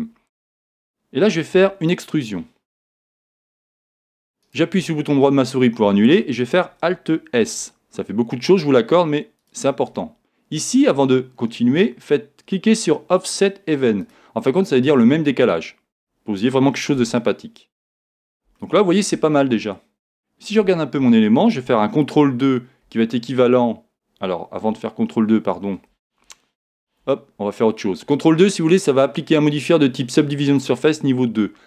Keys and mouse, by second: 0.5 right click, 4.5 right click, 7.4 alt+s, 9.5 click, 11.3-13.2 middle drag, 14.9 click, 16.7 middle click, 17.0 z, 20.6 Tab, 22.8 ctrl+2, 26.7 super+z.